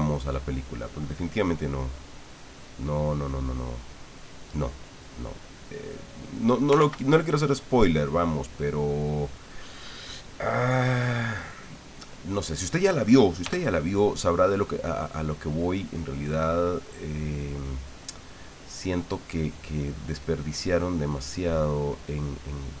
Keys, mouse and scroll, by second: 0.3 click, 1.5-3.4 drag, 3.8 click, 5.1 click, 6.8 ctrl+z, 7.4-9.0 middle drag, 9.1 middle click, 10.0-12.2 middle drag, 13.4 f, 14.2 click, 15.5 click, 16.2 click, 17.1 click, 18.0 middle click, 19.0 middle click, 21.2 click, 21.5 click, 22.7 click.